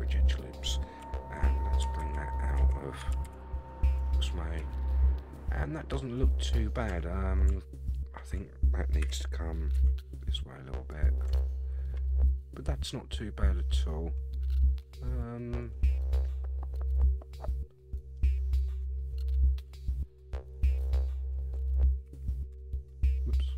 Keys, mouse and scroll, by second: 2.0 shift+z, 2.6 shift+z, 3.2 shift+z, 4.0 Tab, 4.6 a, 4.9-6.7 middle drag, 6.9 Tab, 7.8 alt+click, 9.0 g, 11.3 Tab, 11.6 scroll down 2, 11.8-13.8 middle drag, 13.9 scroll up 2, 14.7-18.2 middle drag, 18.7 Tab, 19.5 alt+click, 19.9 middle click, 21.2 alt+click, 22.0 g.